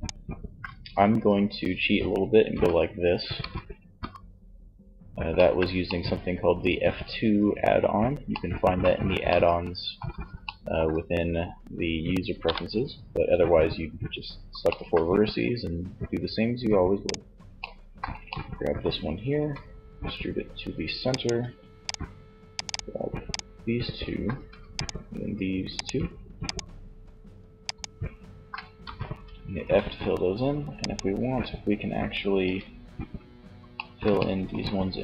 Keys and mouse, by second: 1.6 f, 2.4 f, 3.0 f, 17.0 middle click, 18.6 e, 20.4-22.2 drag, 22.2-28.4 right drag, 28.0 f, 29.9-31.8 right drag, 32.8 middle click.